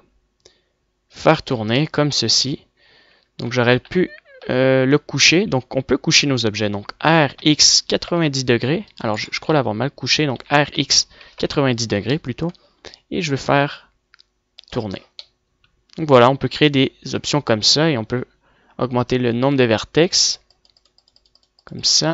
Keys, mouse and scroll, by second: 1.3 click, 1.9 middle click, 2.7 click, 2.8 middle click, 3.9 ctrl+z, 4.5 KP_1, 5.5 KP_3, 7.0 r, 9.0 click, 9.2 middle click, 9.5 KP_1, 10.3 r, 15.3 middle click, 15.6 middle click, 15.9 middle click, 16.1 middle click, 17.1 middle click, 17.7-18.2 drag, 19.7 middle click.